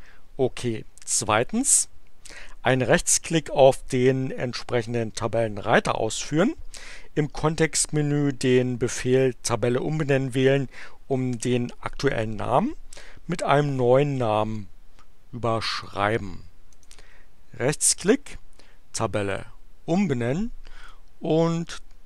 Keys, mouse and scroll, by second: 15.8 click, 16.6 right click, 19.2 click, 20.8 click.